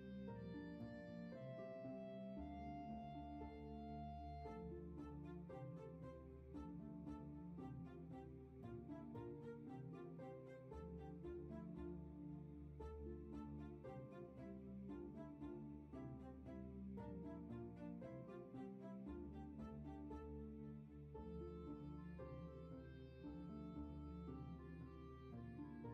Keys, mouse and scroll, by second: 9.4 ctrl+z.